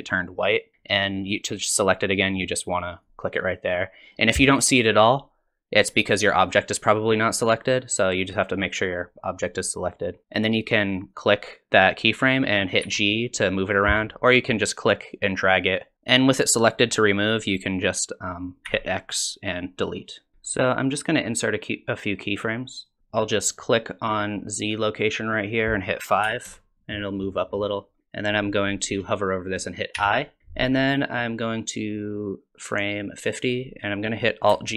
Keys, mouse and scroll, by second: 3.0 click, 5.1 click, 8.3 click, 10.2 click, 11.1 click, 12.8 g, 15.1 click, 18.7 x, 22.8 click, 25.4 click, 30.0 i, 31.6 click.